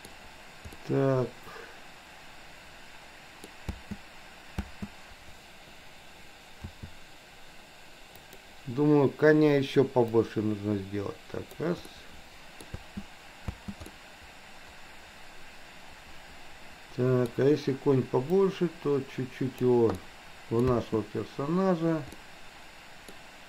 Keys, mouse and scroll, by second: 0.8 scroll up 1, 0.9-3.5 middle drag, 3.8 space, 4.7 space, 6.7 s, 10.3-11.7 drag, 11.9-12.7 middle drag, 12.9 space, 13.5 space, 13.8-17.3 middle drag, 18.4 click, 18.8-19.7 drag, 19.9-20.5 middle drag, 20.5 scroll down 1, 20.8 space, 22.3-23.3 middle drag.